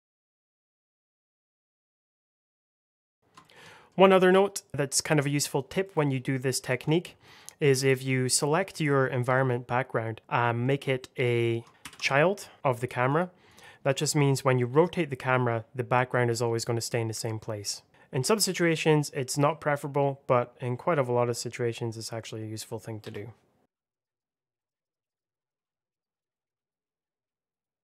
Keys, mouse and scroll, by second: 0.0-2.1 typing, 0.0 click, 0.0 middle click, 0.2 Escape, 0.6 click, 0.7 click, 0.9 click, 0.9 Delete, 1.1 click, 1.2 ctrl+click, 1.3 click, 1.4 click, 1.8 click, 2.0 click, 2.1 click, 2.2 middle click, 2.3 click, 2.6 middle click, 2.6 Escape, 2.7 ctrl+i, 2.8 click, 2.9 Return, 3.1 click, 3.1 middle click, 3.3 shift+middle click, 3.6 middle click, 4.2 click, 4.7 middle click, 6.6 alt+z, 7.1 middle click, 7.5 click, 7.9 middle click, 11.0 shift+click, 12.5 click, 13.0 double click, 13.4 click, 13.9 middle click, 14.7 click, 17.9 ctrl+z, 18.4 middle click, 19.2 g, 22.9 Escape, 23.6 middle click, 23.7 click, 23.8 alt+middle click, 24.0 click, 24.0-26.9 typing, 24.2 click, 24.6 middle click, 24.6 click, 24.7 alt+middle click, 24.8 shift+middle click, 24.8 scroll up 1, 25.0 click, 25.1 scroll down 1, 25.4 alt+middle click, 25.4 alt+middle click, 25.6 click, 26.0 click, 26.1 alt+middle click, 26.2 click, 26.3 scroll down 1, 26.7 click, 26.8 middle click, 26.8 click, 26.9 middle click, 27.0 middle click, 27.0 alt+middle click, 27.0 click, 27.4 click.